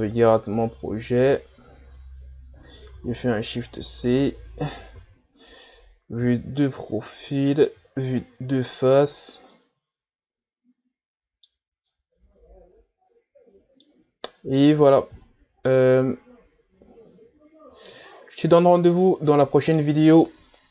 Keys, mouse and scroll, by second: 0.0 scroll down 2, 0.7-1.5 ctrl+scroll up 4, 3.0 shift+c, 3.7-4.2 scroll up 2, 4.2 ctrl+s, 4.9 KP_3, 7.6 KP_1, 9.3 scroll down 2, 9.5-14.0 middle drag, 14.0-14.8 scroll up 2, 14.8-15.2 scroll up 3, 15.2-18.2 middle drag, 18.2-19.0 scroll down 6, 19.0-20.7 middle drag.